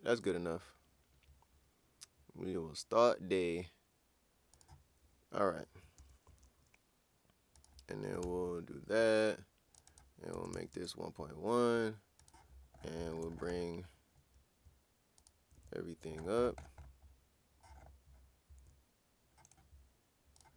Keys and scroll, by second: 6.0 ctrl+super+w, 8.2 ctrl+\, 10.2-11.0 typing.